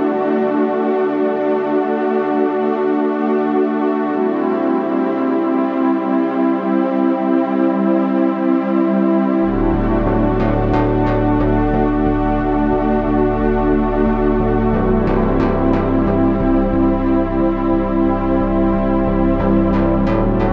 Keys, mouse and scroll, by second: 0.4 s, 1.9 e, 8.4 e, 11.2 e.